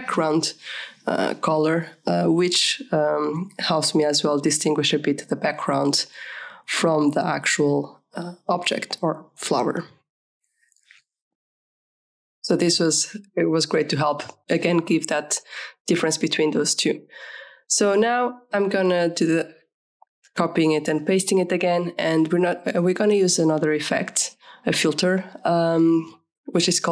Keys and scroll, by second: 10.5 KP_Subtract, 10.6 Return, 11.1 KP_Subtract, 11.3 Return, 18.9 ctrl+shift+c, 19.6 ctrl+shift+v, 26.1-26.9 typing.